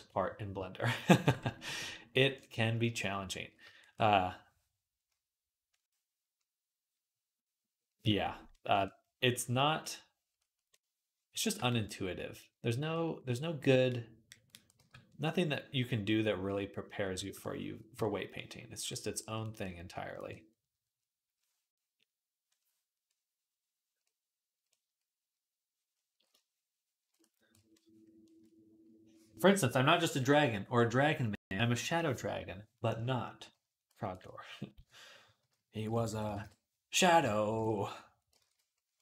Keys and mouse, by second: 0.0-5.5 middle drag, 1.1 ctrl+Tab, 5.5-11.6 drag, 12.6 x, 13.7-37.3 drag, 34.6-36.2 typing, 37.4 ctrl+z, 38.2 ctrl+z, 38.9 click.